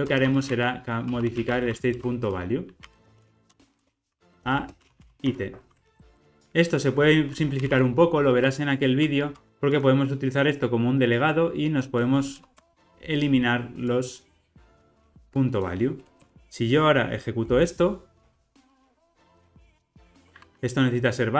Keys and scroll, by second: 5.8 Escape, 6.1 ctrl+alt+o, 9.4 alt+Return, 17.5 ctrl+r.